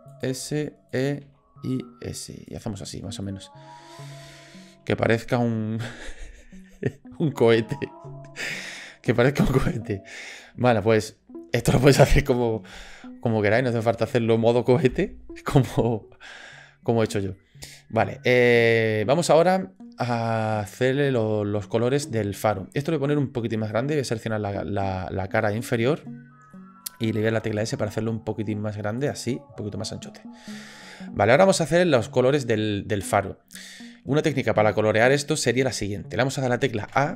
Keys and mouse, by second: 0.4 e, 1.2 s, 2.8 click, 3.2 click, 3.4 middle click, 4.3 shift+middle click, 6.6 middle click, 13.9 click, 17.3 shift+click, 18.0 shift+click, 19.2 shift+click, 22.4 middle click, 23.7 click, 24.2 middle click, 25.0-26.0 middle drag, 26.5 middle click, 27.5 s, 29.3 middle click, 36.9 a.